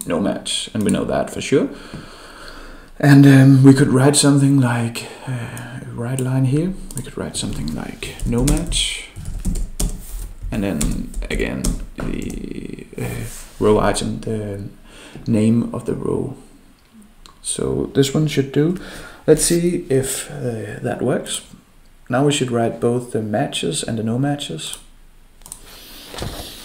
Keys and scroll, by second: 12.2 ctrl+v.